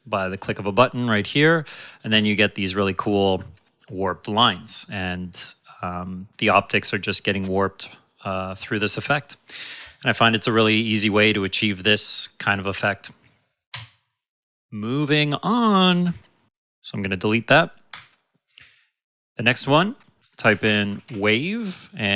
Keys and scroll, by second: 2.0 space, 13.7 space, 20.2-21.5 typing.